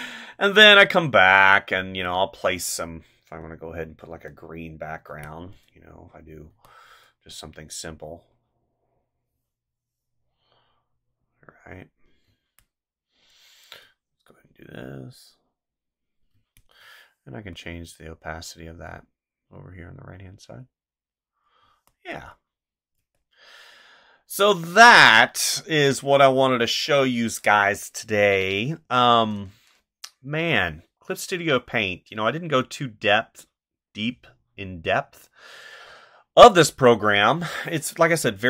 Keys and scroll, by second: 5.1 space, 6.5 space, 12.2 space, 16.3 space, 21.6 space.